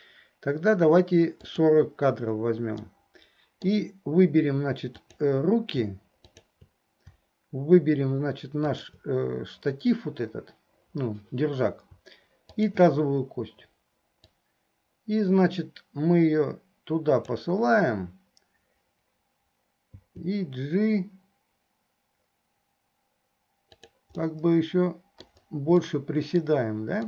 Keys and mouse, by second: 1.6 click, 2.9-3.9 middle drag, 5.0 click, 6.4 shift+click, 8.7 shift+click, 12.5 shift+click, 14.3-17.6 drag, 24.3-25.5 drag, 24.3 middle click, 24.3-25.5 right drag, 26.1 click, 26.1 right click.